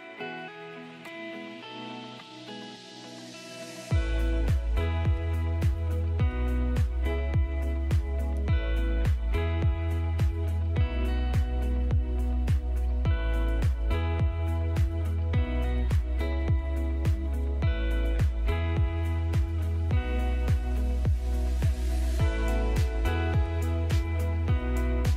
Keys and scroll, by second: 5.2 Escape, 10.1 ctrl+z, 11.7 F2, 13.3 F3, 14.2 ctrl+z, 15.6-17.4 typing, 17.7 Escape, 19.0 shift+Page_Down, 21.5 F2, 23.8 F3, 24.2 Escape.